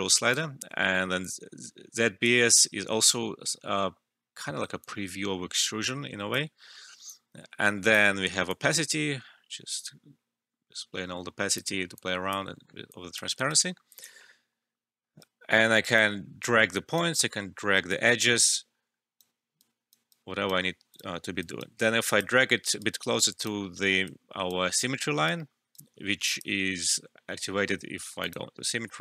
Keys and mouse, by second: 4.8-11.9 alt+drag, 5.8 typing, 8.0 typing, 11.9 alt+click, 12.5 alt+middle click, 12.9 alt+click, 13.3 alt+right click, 13.6 alt+middle click, 13.6 typing, 13.9 alt+click, 15.2-20.9 right drag, 21.8 alt+middle click, 22.0 alt+click, 22.8-26.0 right drag, 26.0 alt+middle click, 26.2 alt+click.